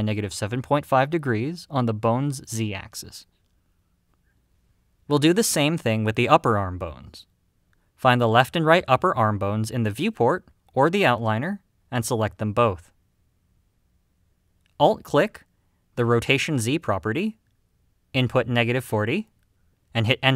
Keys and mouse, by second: 7.4 click, 12.4 KP_Decimal, 15.9 click, 18.7-20.3 alt+drag.